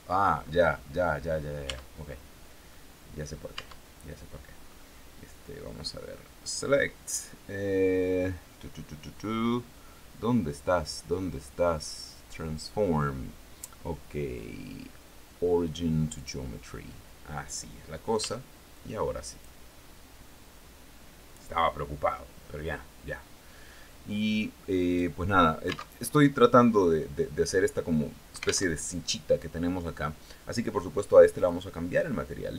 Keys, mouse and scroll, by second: 0.3-0.6 scroll down 2, 1.1 Tab, 2.1 scroll up 2, 3.0 Tab, 5.9 click, 15.6 click, 17.6 s, 18.7 click, 24.2 click, 25.4 alt+Tab, 28.1 alt+Tab, 30.8 click, 32.4 click.